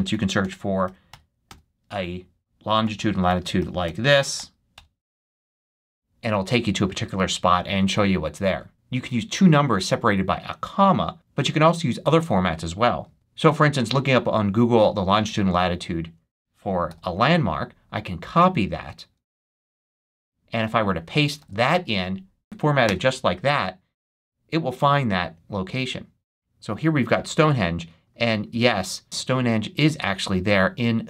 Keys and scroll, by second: 0.0-4.3 typing, 4.6 Return, 13.0 super+Tab, 16.8 super+c, 19.3 super+h, 21.0 super+a, 21.3 super+v, 22.7 Return.